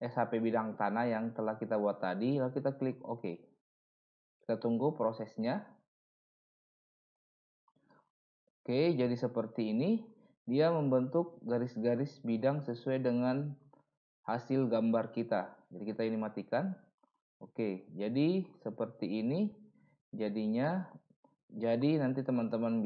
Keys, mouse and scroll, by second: 20.6 middle click, 21.7 middle click.